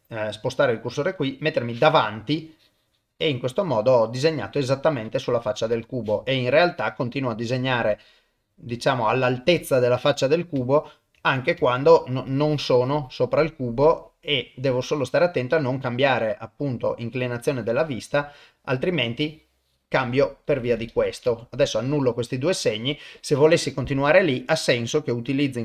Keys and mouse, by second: 1.0 KP_1, 2.4 click, 3.6-5.0 middle drag, 5.7 KP_1, 6.5 click, 7.8 click, 8.7 click, 9.6 middle click, 10.7 ctrl+middle click, 11.2 middle click, 11.6 shift+middle click, 12.3 click, 13.3-16.9 middle drag, 17.2 click, 18.3 middle click, 20.9 ctrl+z, 21.3 ctrl+z, 22.0 middle click, 23.7-25.6 drag.